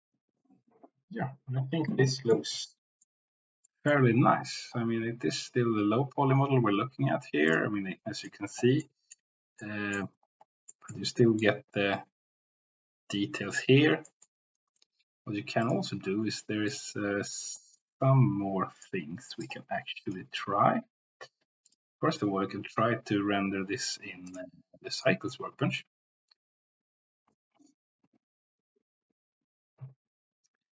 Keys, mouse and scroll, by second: 0.8-2.3 middle drag, 2.7 middle click, 3.7 middle click, 9.0 middle click, 9.5 middle click, 10.6 middle click, 11.1 shift+middle click, 14.1 shift+middle click, 16.7 click, 18.7 click, 19.4 click, 20.0 click, 24.4-25.0 drag.